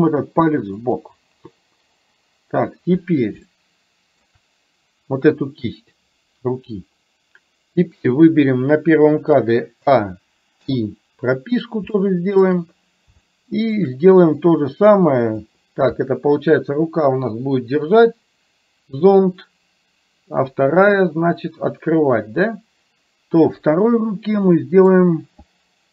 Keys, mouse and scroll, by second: 3.5 shift+middle click, 9.9 a, 10.6 i, 12.0 shift+middle click, 13.3 shift+middle click, 14.4-15.5 drag, 24.6 middle click.